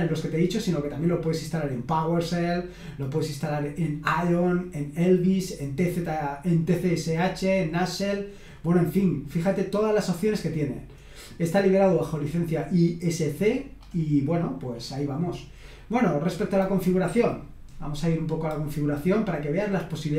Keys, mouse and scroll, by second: 2.4-3.1 scroll down 2, 5.1-7.1 scroll down 2, 7.1-10.4 scroll down 2, 13.8-15.7 scroll up 1, 15.8 click.